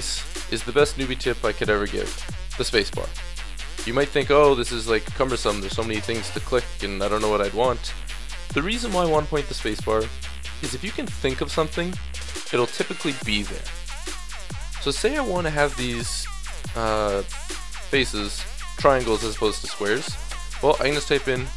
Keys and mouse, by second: 0.0 Escape, 1.1-1.8 middle drag, 1.8-3.7 drag, 2.6 space, 10.6-14.2 drag, 14.2-15.3 middle drag, 15.3 drag, 15.6-16.0 middle drag, 16.0 Tab, 16.0 click, 16.6-17.6 middle drag, 18.6 middle click, 18.6 a, 19.5 a, 20.3 space.